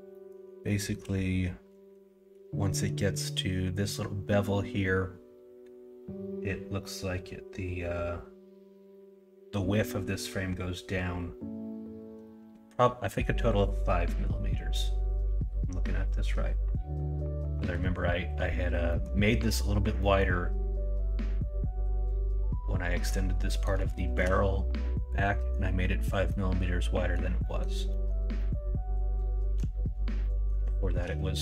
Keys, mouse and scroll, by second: 0.1 middle click, 0.6 shift+middle drag, 18.8 middle click, 20.0 middle drag, 23.4 middle drag, 23.9 shift+middle drag, 25.3 middle click, 26.2-27.1 middle drag, 27.4 middle drag, 27.8 middle drag, 28.3-29.5 middle drag, 30.2 middle drag, 30.7 shift+middle drag.